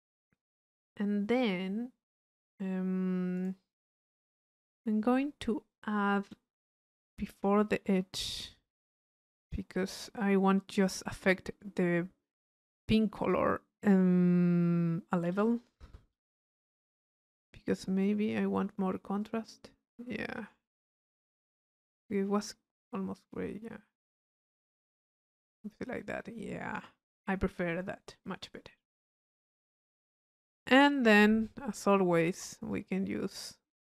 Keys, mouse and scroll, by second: 6.7 middle click, 7.2-8.3 drag, 8.3 right click, 8.9-10.0 drag, 10.0 middle click, 10.6-11.6 drag, 11.1-12.3 middle drag, 12.3 right click, 13.2 click, 16.9 click, 17.7 click, 19.2-25.8 drag, 25.8 middle click, 26.4 click, 31.8-33.7 drag.